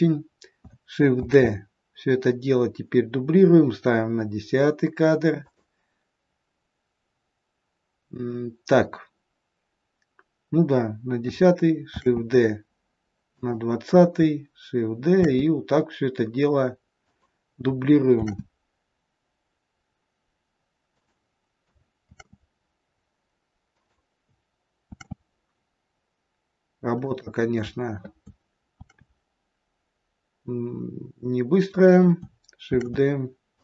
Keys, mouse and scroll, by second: 1.1 shift+d, 11.8 shift+d, 15.1 shift+d, 18.1 shift+d, 22.1 shift+d, 24.9 shift+d, 28.7 shift+d, 32.6 shift+d.